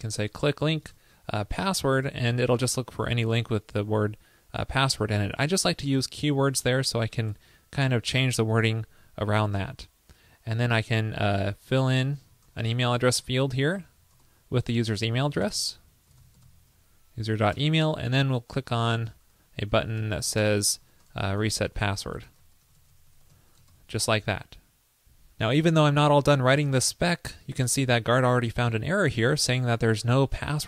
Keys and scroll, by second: 7.3 super+Return, 15.6 ctrl+l, 17.6 super+Return, 23.8 super+s.